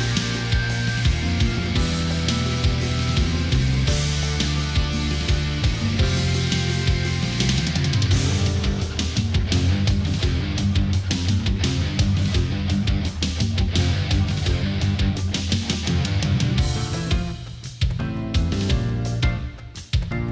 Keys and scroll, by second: 0.0 space, 3.3 ctrl+z, 4.7 space, 12.4 space, 13.5 space, 15.0 space, 16.8 ctrl+z, 17.3 space, 18.4 space.